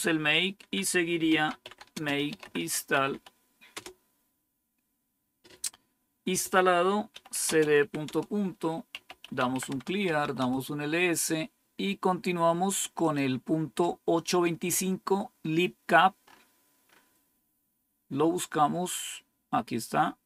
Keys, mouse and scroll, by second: 0.5 Down, 1.0-3.7 typing, 6.8-10.8 typing, 12.9 click, 16.2 scroll up 1, 19.8 click.